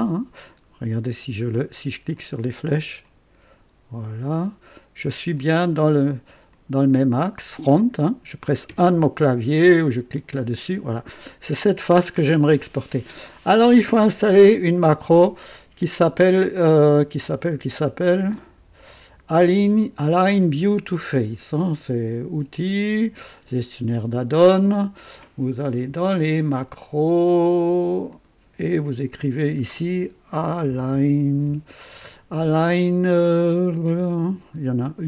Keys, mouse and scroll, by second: 2.1 click, 3.0 click, 5.3 click, 6.5 click, 7.8 click, 8.7 KP_1, 10.1 click, 22.5 click, 23.5 click, 27.2 click, 28.1 click, 29.2 click, 30.3-31.9 typing.